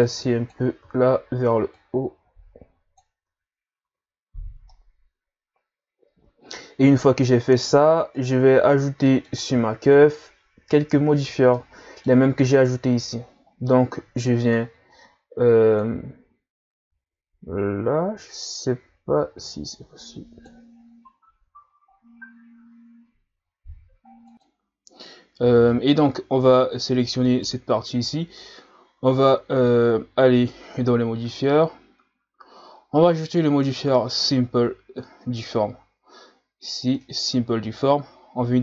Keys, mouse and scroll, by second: 0.8 z, 1.7-3.3 drag, 3.3 Tab, 3.8 a, 4.2 scroll down 2, 4.7-7.7 middle drag, 8.1 right click, 9.0-9.9 middle drag, 9.9 KP_1, 11.5-12.5 middle drag, 12.5 right click, 15.7-20.4 drag, 27.3 right click, 29.6-34.2 drag.